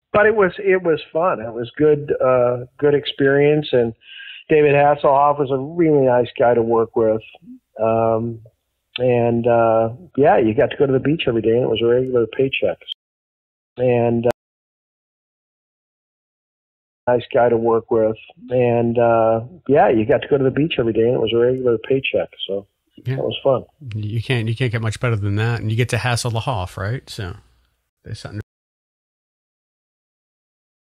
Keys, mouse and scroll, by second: 1.1 ctrl+s, 2.1 click, 2.9 click, 4.1-6.1 drag, 6.4 click, 7.3 click, 8.5-9.8 drag, 10.6-12.8 drag, 13.4 ctrl+shift+Delete, 13.7 space, 14.2 space, 14.5 click, 15.8 click, 16.9 click, 17.0 space, 20.3 click, 21.2 click, 25.2 click, 26.3-27.4 drag, 27.8 Delete, 29.0 click, 29.8 click.